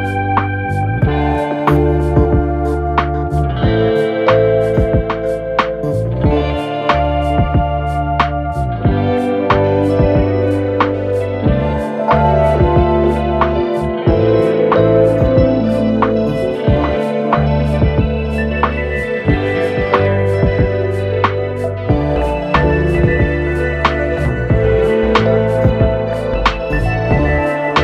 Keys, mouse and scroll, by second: 8.8 ctrl+click, 10.0 ctrl+click, 10.8 ctrl+click, 12.0 ctrl+click, 12.6 ctrl+click, 13.9 ctrl+click, 14.6 ctrl+click, 15.7 ctrl+click, 16.5 ctrl+click, 17.4-20.3 ctrl+drag, 21.6-24.0 ctrl+drag.